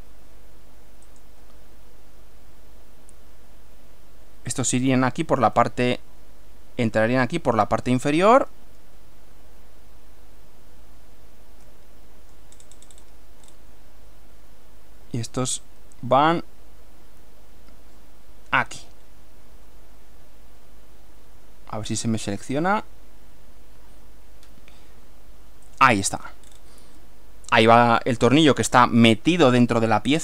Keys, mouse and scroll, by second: 1.2 click, 4.6 click, 5.6-7.8 middle drag, 11.7 shift+middle click, 12.6 shift+scroll up 1, 12.8 shift+scroll down 1, 12.8 scroll up 1, 13.0 scroll down 1, 13.1-13.7 scroll up 2, 25.7 click, 26.5-26.8 scroll down 1, 27.1-28.4 middle drag.